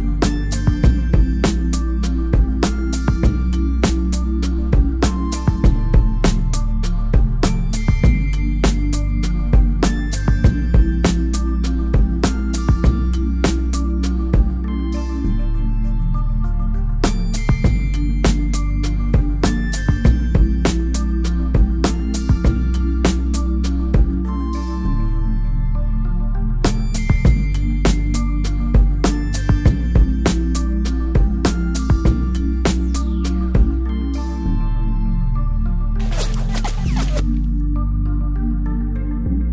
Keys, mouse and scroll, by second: 0.0-2.2 typing, 2.1 click, 12.4 space, 13.2 ctrl+m, 13.9 click, 24.6 click, 24.9 ctrl+m, 25.0 scroll down 1, 26.5 click, 27.3 click.